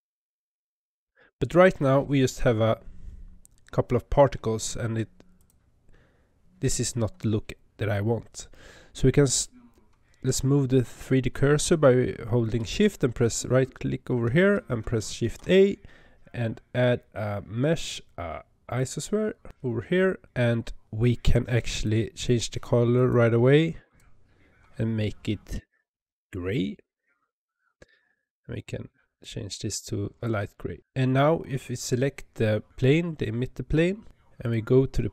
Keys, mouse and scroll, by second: 5.2 click, 9.0 click, 13.1 shift+right click, 15.1 shift+a, 21.6 click, 22.8-26.8 drag, 28.0 click, 30.8 click, 32.7 click, 34.3 click.